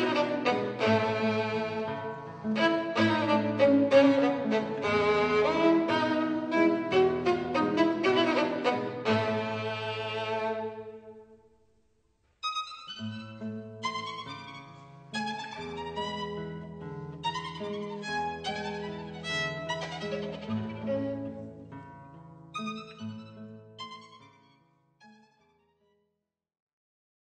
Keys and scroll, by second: 9.0 c, 12.6 super+z, 12.9 super+z.